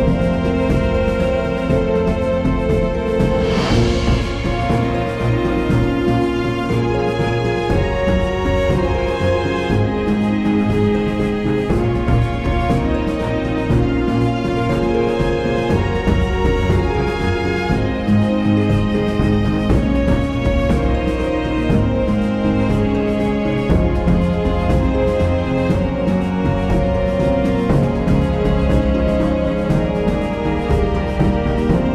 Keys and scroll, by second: 5.0-5.8 typing, 24.3 super+;.